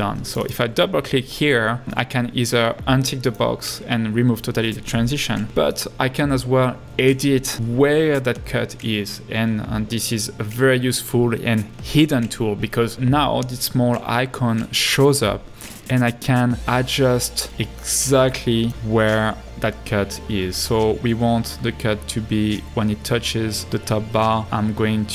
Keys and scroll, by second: 23.6 Right.